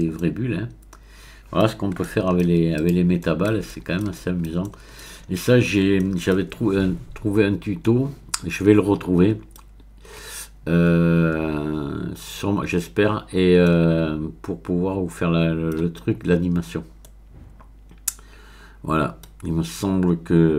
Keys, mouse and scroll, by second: 0.2-2.5 middle drag, 2.8 click, 3.2 middle click, 4.2-5.3 middle drag, 5.3-6.0 scroll up 1, 6.0-7.4 shift+middle drag, 7.4-7.8 scroll up 1, 7.8-9.9 middle drag, 9.9-10.5 scroll down 1, 13.6-19.6 middle drag.